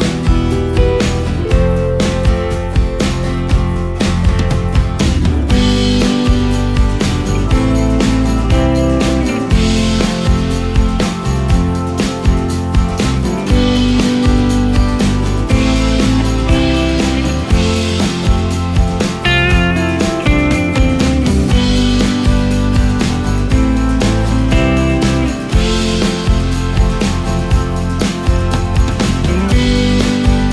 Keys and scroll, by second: 1.0 ctrl+space, 4.8 ctrl+g, 5.4 ctrl+space.